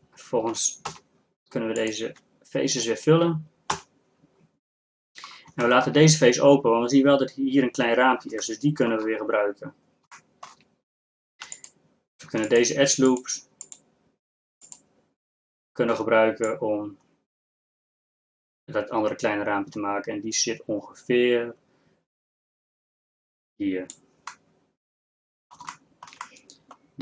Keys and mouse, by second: 0.9 f, 3.8 f, 5.2 middle click, 11.6-16.6 drag, 21.9-24.2 middle drag, 24.7 middle click, 25.3 middle click.